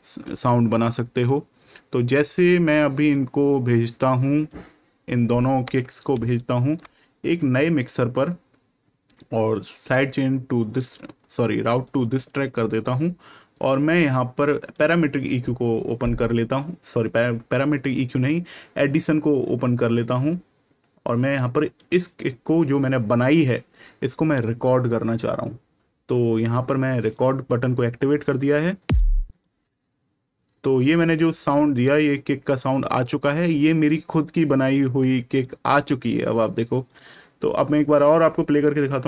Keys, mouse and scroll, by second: 2.3 click, 6.2 ctrl+shift+click, 7.8 shift+right click, 11.6 click, 21.5 click, 26.9 click, 31.7 click, 36.7 click.